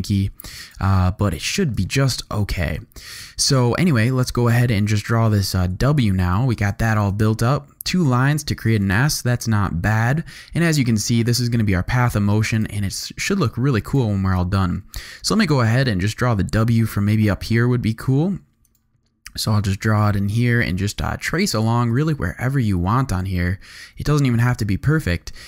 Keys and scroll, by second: 1.8 alt+super+space, 3.1 x, 3.6 z, 5.6 z, 6.0 space, 8.3 z, 8.9 alt+space, 9.9 space, 10.1 v.